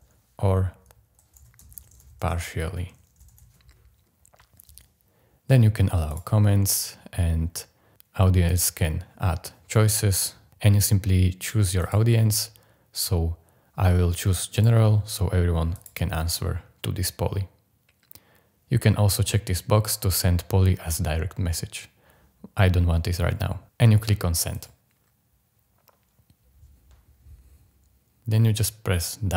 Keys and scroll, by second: 1.1-3.4 typing.